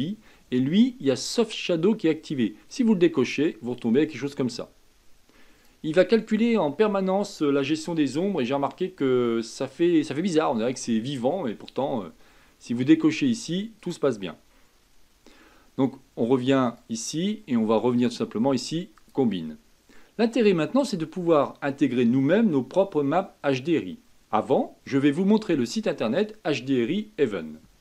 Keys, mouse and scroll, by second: 2.7 click, 5.6 click, 13.8 click, 16.6-19.8 drag, 20.2-26.2 middle drag.